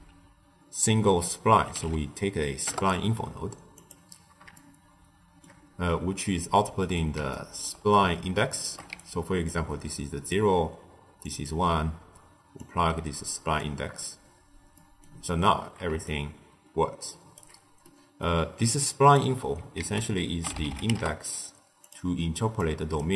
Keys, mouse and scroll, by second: 4.5-8.8 shift+middle drag, 8.8 d, 8.9-9.4 right drag, 9.4 d, 9.7-10.2 drag, 10.2-11.0 d, 11.2 click, 11.4 d, 12.5 drag, 14.7 middle click, 15.2-15.8 scroll up 1, 15.8 d, 16.0-17.3 right drag, 17.3 d, 17.7-18.6 middle drag, 18.6 click, 19.7 ctrl+a, 22.5 click.